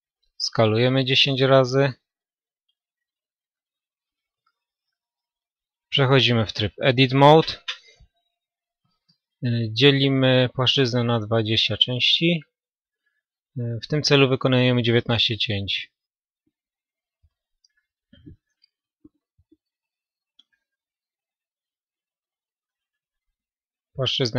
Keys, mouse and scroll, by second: 1.2 s, 5.7 Tab, 8.1 w, 12.6-14.6 drag, 21.6-24.3 middle drag.